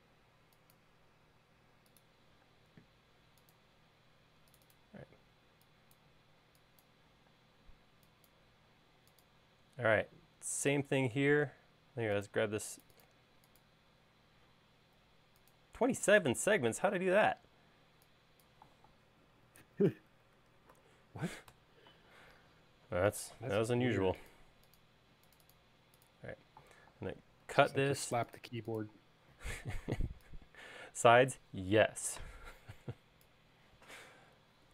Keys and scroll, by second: 2.5 space, 5.0 e, 7.4 space, 7.8 e, 19.2-20.7 typing, 27.5 super+x.